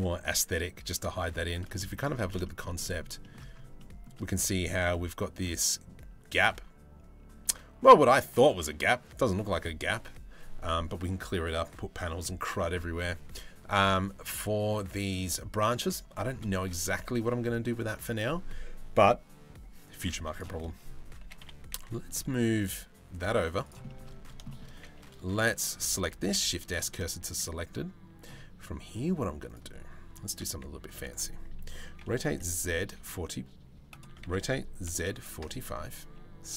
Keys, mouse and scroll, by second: 1.4 shift+middle drag, 2.1 shift+middle drag, 2.4 middle drag, 2.8 shift+middle drag, 3.4 shift+middle drag, 16.5 shift+middle drag, 20.9 g, 23.5 shift+middle drag, 24.1 shift+middle click, 25.1 click, 25.9 shift+s, 26.9 shift+a, 29.9 Tab, 31.7 r, 33.9 r, 35.7 s.